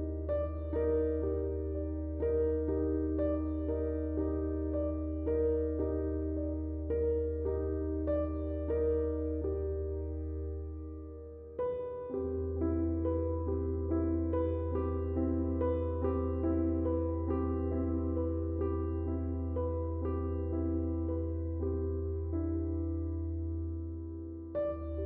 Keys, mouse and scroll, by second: 13.4 click, 17.1-23.0 drag.